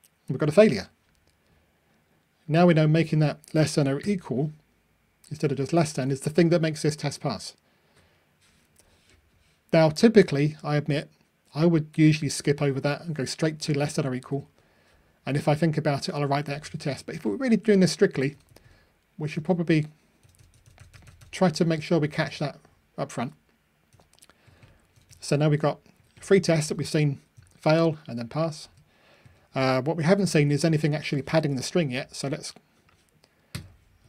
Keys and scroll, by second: 5.9 ctrl+r, 29.9 super+c, 30.6 super+v.